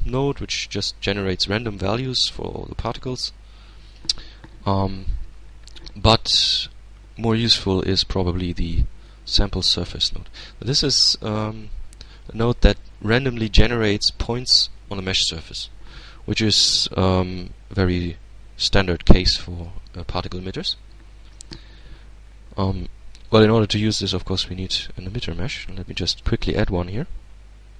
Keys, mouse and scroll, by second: 4.9 x, 6.1 shift+a, 7.8 click, 8.6 middle click, 9.7-11.4 drag, 10.4-11.4 middle drag, 21.1-22.9 drag, 22.9-23.3 scroll down 1, 23.7 Tab, 24.4 shift+Tab, 25.4 shift+a.